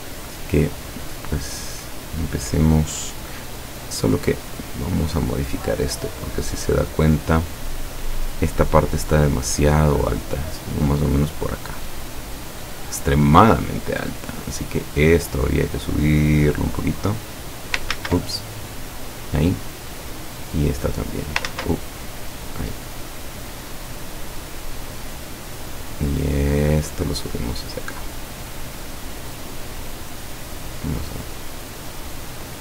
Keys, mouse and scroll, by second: 4.3 click, 9.2-12.7 drag, 14.0 click, 14.8-16.7 drag, 17.0 click, 18.0 ctrl+z, 18.5 ctrl+click, 20.0 click, 20.7 click, 21.5 ctrl+z, 22.0-25.4 ctrl+drag, 26.0-28.3 drag, 30.8 click, 31.5 click, 32.0 click.